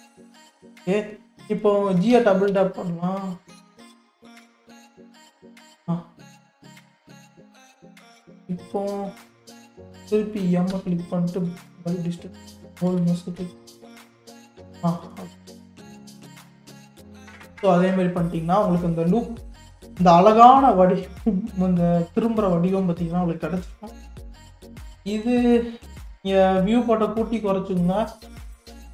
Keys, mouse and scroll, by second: 2.1 g, 5.8 click, 6.3-8.0 middle drag, 8.0-8.4 scroll down 1, 8.4 middle click, 8.9-10.7 scroll up 4, 10.7 m, 12.9 a, 13.4 m, 14.8-15.2 scroll down 5, 15.3 click, 15.9-17.1 middle drag, 17.1 KP_3, 17.8-18.7 scroll up 10, 19.0-22.1 shift+middle drag, 23.0 scroll down 1, 23.6 scroll down 5, 23.9-24.9 middle drag, 24.9-25.6 scroll up 1, 25.6-28.9 shift+middle drag.